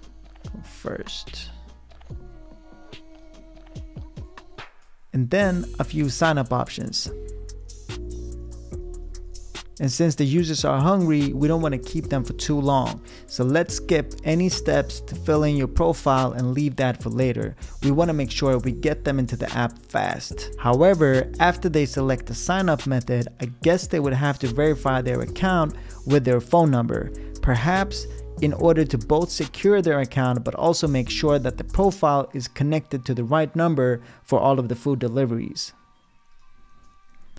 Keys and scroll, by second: 0.0-1.2 typing, 4.5 Return, 7.1-9.6 typing, 36.8-37.3 typing.